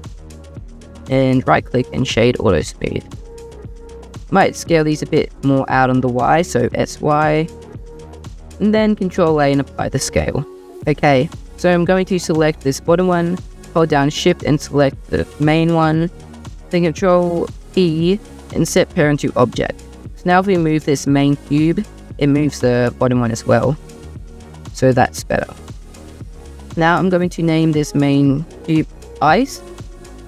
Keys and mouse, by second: 0.8 click, 1.4 click, 4.2 drag, 4.7 shift+click, 5.5 click, 6.1 s, 6.8 y, 8.2-8.9 drag, 8.2-8.9 middle drag, 8.2-8.9 right drag, 9.0 ctrl+a, 10.1 click, 17.5 ctrl+p, 21.1 g, 22.6 Escape, 23.1 click, 24.2 g, 24.6 Escape, 27.4 click, 27.7-29.5 drag.